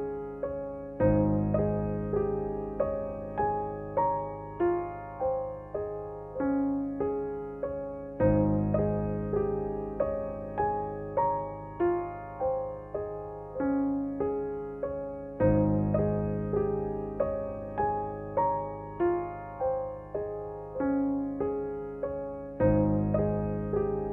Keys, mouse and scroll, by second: 0.5 ctrl+j, 1.8 ctrl+u, 3.1-6.8 drag, 8.3 space, 8.6 click, 8.9 space, 9.5 ctrl+=, 10.2-12.1 typing, 11.8 click, 12.7-14.1 drag, 14.1 ctrl+z, 15.1 ctrl+u, 15.7-17.9 drag, 18.8-20.0 typing, 20.2-22.1 drag, 22.1 x, 22.3 click, 23.2 ctrl+z, 23.5-24.1 drag.